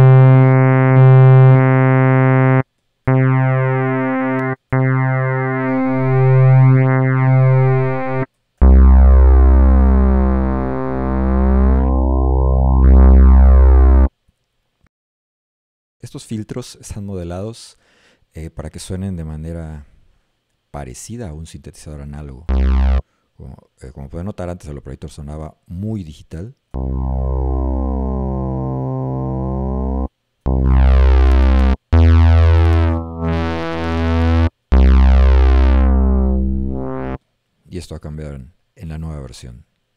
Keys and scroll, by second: 3.1 a, 4.7 a, 8.4 z, 22.5 a, 26.8 a, 30.5 a, 32.0 d, 34.7 a.